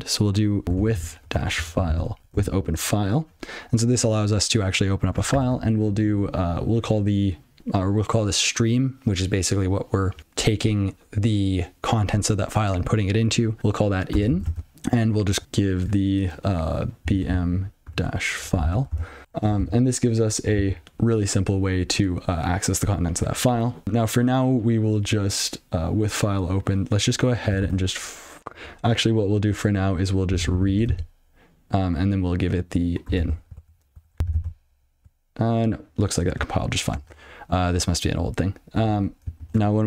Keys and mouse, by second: 0.5-2.7 typing, 5.8 (, 14.3 n, 14.4 space, 17.2-19.3 typing, 20.1 ctrl+f, 20.8 alt+j, 28.1 (, 30.1-31.0 typing, 33.2 n, 33.5 ctrl+f, 34.3 ctrl+c, 36.9 click, 37.4 alt+>.